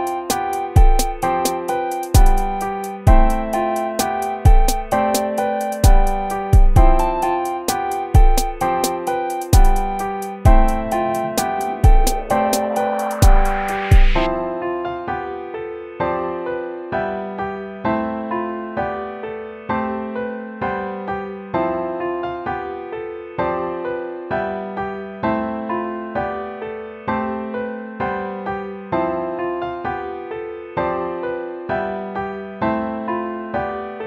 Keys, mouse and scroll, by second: 10.1 ctrl+-, 16.5 ctrl+z, 26.3 ctrl+z, 30.5 ctrl+-.